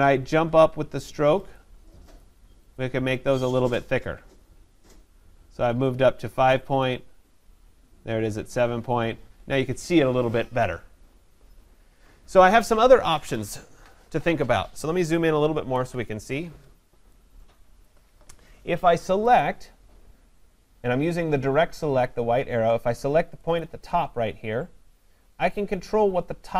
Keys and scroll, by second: 15.5 ctrl+=.